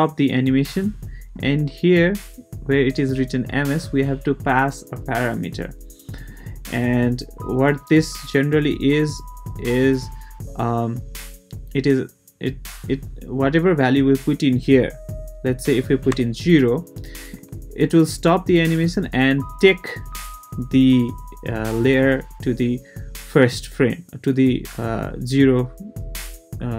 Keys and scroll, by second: 16.1 0.